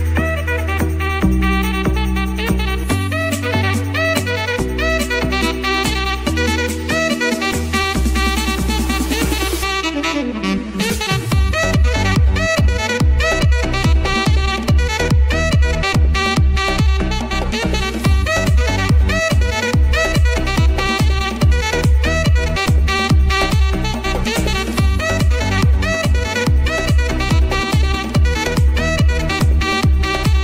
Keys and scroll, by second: 5.2-7.2 typing, 7.7 Return, 15.6 ctrl+z, 22.8 ctrl+z, 24.6 [, 24.7 [.